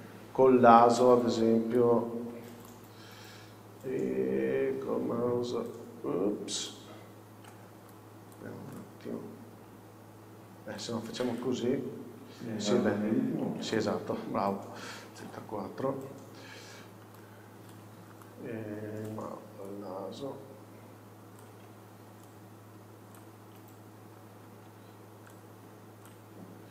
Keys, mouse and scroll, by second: 1.1 shift+right click, 6.8-11.5 ctrl+right drag, 11.5 click, 12.0 scroll down 1, 13.2-13.5 scroll up 1, 13.8 a, 14.0 scroll up 1, 14.7 scroll down 1, 15.5 KP_4, 17.3-19.3 alt+right drag, 19.3 alt+click, 24.3 scroll up 1, 26.2 shift+click, 26.5 scroll down 1.